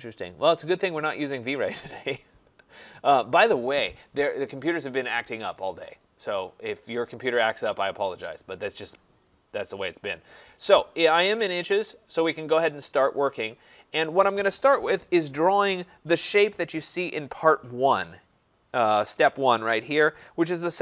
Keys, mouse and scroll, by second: 2.2-7.2 drag.